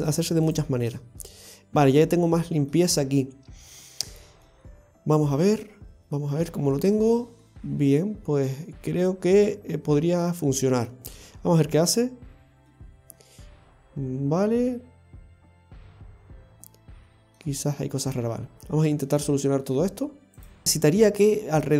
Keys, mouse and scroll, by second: 0.1 right click, 0.9-1.2 scroll down 1, 1.2 middle click, 4.5 middle click, 6.0-6.5 scroll down 2, 6.5 shift+middle click, 6.9-7.4 scroll up 1, 7.4 middle click, 8.9 scroll down 1, 9.9 middle click, 12.0 click, 12.8 middle click, 20.4 click, 20.6 shift+middle click, 20.6-21.5 scroll up 1.